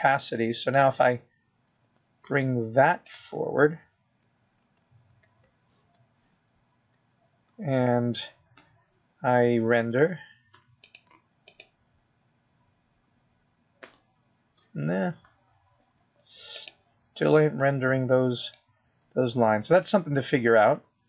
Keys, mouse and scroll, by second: 2.0 click, 7.0 KP_0, 13.2 click, 20.9 middle click.